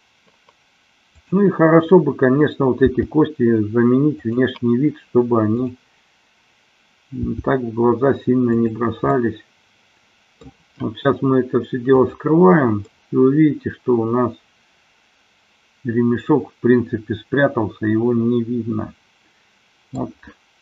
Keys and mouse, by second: 3.0 g, 4.4 click, 5.5-6.6 drag, 7.5 g, 9.4-10.6 middle drag, 12.0 click, 12.9-20.0 middle drag.